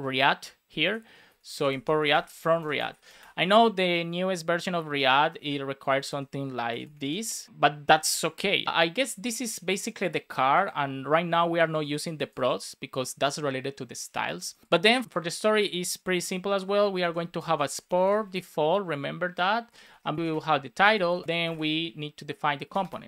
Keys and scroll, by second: 1.0 shift+r, 1.8 space, 3.4 super+s, 3.7 Right, 4.8 super+Left, 5.1 alt+Right, 5.9 alt+shift+Left, 6.6 shift+8, 6.8 space, 7.2 shift+r, 7.4 super+s, 16.1 Return, 17.3 Return, 17.5 space, 19.6-21.1 typing, 20.1 Return, 21.2 Return.